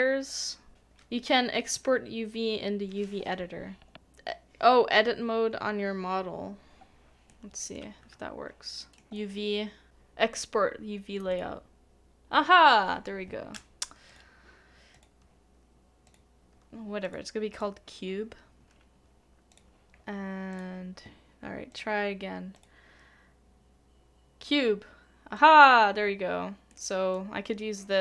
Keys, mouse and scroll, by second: 7.3 middle click, 8.0 Tab, 8.8 middle click, 26.7 middle click.